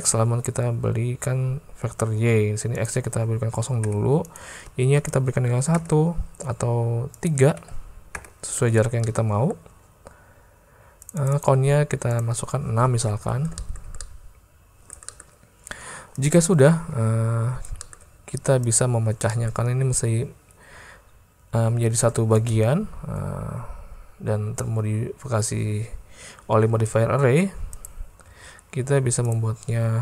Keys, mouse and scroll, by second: 2.9-4.0 drag, 4.4-6.3 drag, 7.2-8.4 drag, 9.1 middle click, 11.0 click, 13.2 alt+a, 13.6 shift+drag, 14.0-15.0 drag, 15.1 shift+click, 17.0 alt+a, 17.8 shift+click, 19.3 click, 22.4 space, 26.8 space, 27.9 click, 28.3 alt+a.